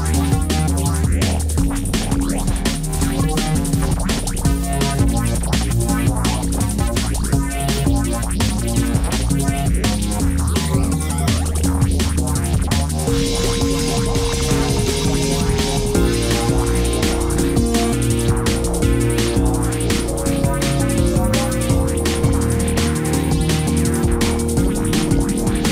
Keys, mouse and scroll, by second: 19.2 ctrl+d.